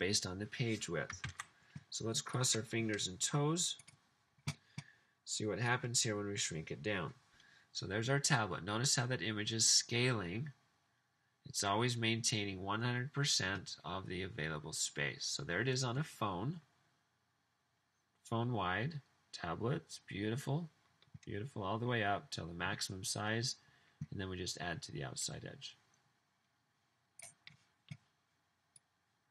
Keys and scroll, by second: 1.2 super+s.